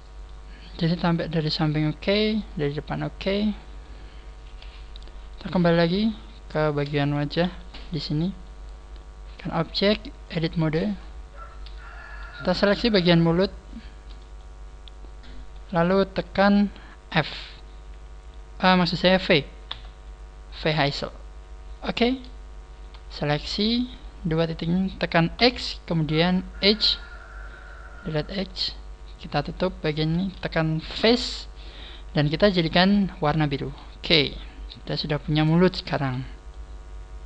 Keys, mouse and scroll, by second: 0.5 scroll down 2, 1.4 middle click, 2.4 middle click, 4.5 KP_1, 5.2 right click, 7.4 g, 8.4 right click, 9.3 click, 10.3 click, 10.9-11.5 scroll up 6, 12.0 right click, 12.3 shift+right click, 13.3 shift+right click, 13.7 shift+right click, 14.3 shift+middle click, 16.7-18.5 scroll up 1, 19.5 scroll up 1, 19.7 v, 22.1 click, 22.7 right click, 23.1 shift+right click, 26.7 x, 28.3 right click, 29.0 shift+right click, 30.1 shift+right click, 31.0 f, 33.3 click, 33.7 a, 34.1-34.9 scroll down 7, 35.3 scroll down 1, 35.9 Tab, 36.5 middle click.